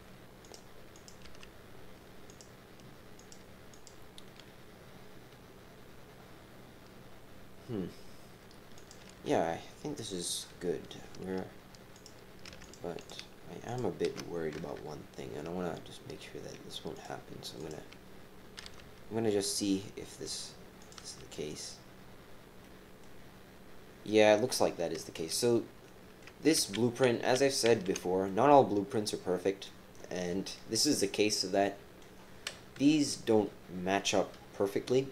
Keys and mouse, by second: 0.9 click, 1.2 g, 3.1 click, 3.7 click, 6.1 middle click, 8.8 click, 9.1 g, 12.5-13.2 typing, 13.0 alt+shift+click, 13.6 alt+shift+click, 14.5 KP_Decimal, 16.9 click, 18.6 g, 20.8 click, 21.0 g, 22.6 click, 24.0 click, 25.1-26.2 drag, 26.5 ctrl+z, 27.1 ctrl+z, 27.7 ctrl+z, 28.2-29.6 drag, 31.0 click, 31.6 click, 32.9 KP_1.